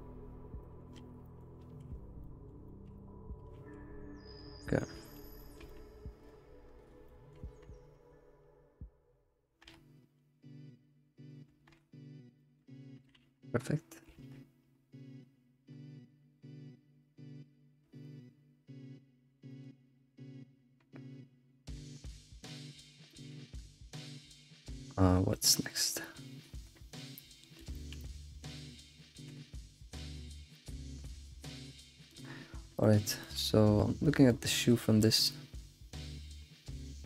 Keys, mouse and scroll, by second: 0.6-1.0 middle drag, 1.0 alt+shift+z, 1.3 middle click, 1.7 ctrl+s, 2.0-2.3 scroll up 1, 2.3-2.6 middle drag, 2.6 scroll up 1, 2.7-3.5 shift+middle drag, 3.5 ctrl+s, 4.8-6.7 middle drag, 6.7-7.0 scroll up 3, 7.1-7.6 shift+middle drag, 7.6 scroll down 2, 12.4 middle click, 13.2 alt+shift+z, 22.6 middle click, 22.9 alt+middle click, 23.3 alt+shift+z, 23.7-25.1 shift+middle drag, 25.1 scroll down 1, 25.4-30.4 middle drag, 30.4 scroll down 3, 30.6-32.3 middle drag, 32.3-32.8 scroll up 7, 32.8-34.6 shift+middle drag, 34.6-35.1 scroll down 3, 35.1-37.0 shift+middle drag.